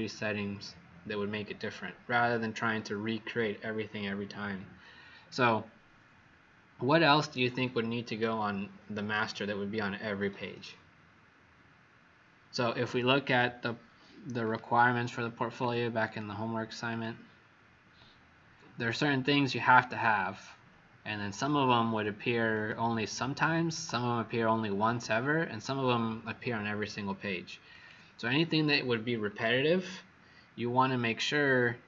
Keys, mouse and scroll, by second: 5.2 click, 29.5-30.0 scroll down 3, 30.7-31.0 scroll down 2.